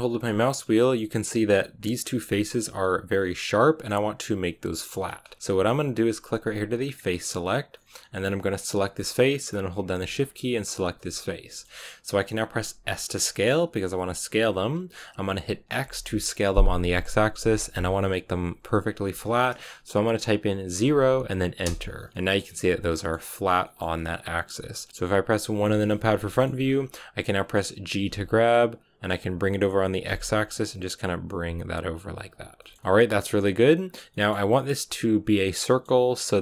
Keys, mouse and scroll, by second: 0.5 scroll down 2, 0.7 middle click, 1.5 right click, 1.9-6.8 middle drag, 6.8 click, 7.6-8.6 middle drag, 8.6-10.8 right drag, 10.8-12.6 middle drag, 12.6 s, 22.1-23.4 middle drag, 23.4 scroll down 3, 23.5-25.5 middle drag, 25.5 KP_1, 26.2 shift+middle click, 26.4-27.9 scroll up 5, 27.9 g, 32.3 scroll down 3, 32.5-33.9 shift+middle drag, 33.9 scroll down 1, 34.0-36.4 middle drag.